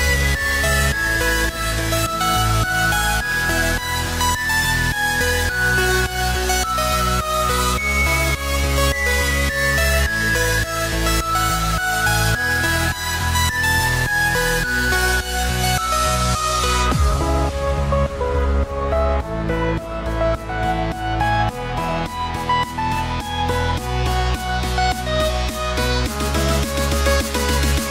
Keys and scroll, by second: 2.3 ctrl+j, 10.9 ctrl+u, 19.1 ctrl+t.